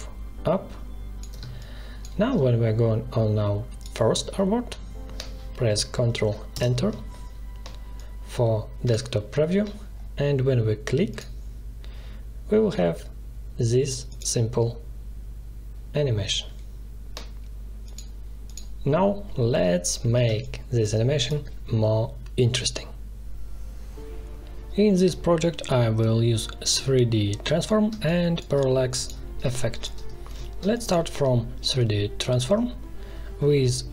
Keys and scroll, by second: 1.3 space, 6.5 ctrl+Return, 20.2 space, 27.8 space.